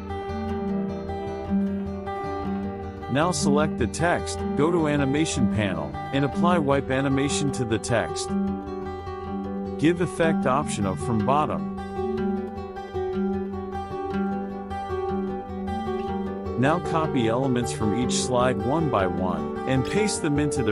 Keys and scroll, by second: 11.6 KP_Subtract, 18.6 ctrl+c, 20.2 ctrl+v.